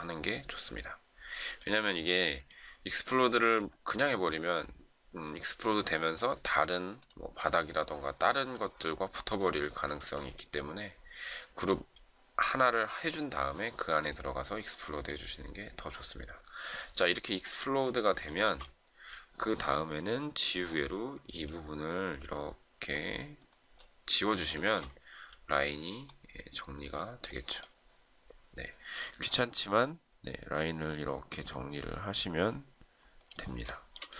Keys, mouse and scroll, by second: 18.2 shift+scroll down 1, 18.4-19.1 shift+scroll up 1, 24.3 shift+middle click, 33.6 shift+middle click.